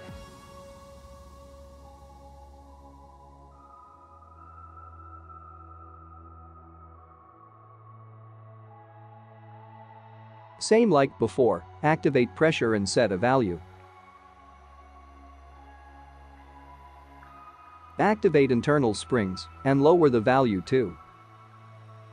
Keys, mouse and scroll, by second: 1.8 KP_0, 8.2 click, 8.2 space, 9.2 click, 10.2-11.0 scroll up 2, 11.0-12.0 scroll down 1, 12.0-12.3 scroll down 3, 12.7-13.4 scroll up 2, 13.5 click, 14.5 click, 17.4 click, 18.0-18.7 scroll up 2, 19.1 click, 19.9 click.